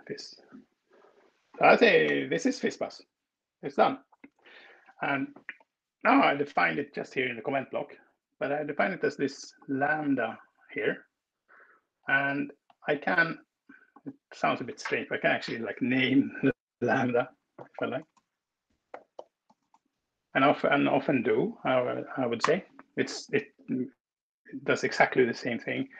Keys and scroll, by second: 0.2 Escape, 2.1 BackSpace, 14.5 space, 16.9-19.9 typing, 20.2 Escape, 22.4 alt+Return.